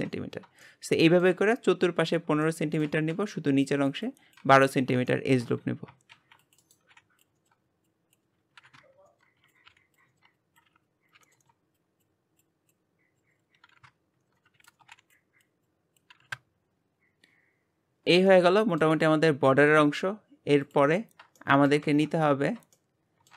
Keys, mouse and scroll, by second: 0.6-6.1 shift+middle drag, 6.1 ctrl+r, 6.9 g, 7.4 shift+middle click, 7.7 click, 8.3 click, 9.4 shift+middle click, 9.7 ctrl+r, 10.1 g, 10.5 shift+middle click, 10.8 click, 11.2 ctrl+z, 11.4 click, 11.8 ctrl+z, 11.9 shift+middle click, 12.2 scroll up 2, 12.4 click, 13.2-14.2 drag, 14.3 click, 15.1 scroll down 3, 15.2 shift+middle click, 15.6 ctrl+r, 15.9 shift+middle click, 16.0 g, 16.6 click, 17.2 click, 19.4-19.8 scroll up 1, 19.8-22.1 shift+middle drag, 22.1 click, 22.9 shift+middle click.